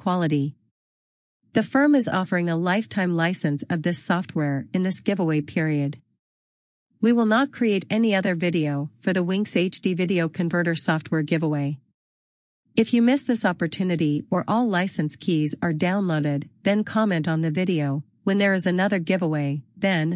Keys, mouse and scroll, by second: 16.2 click.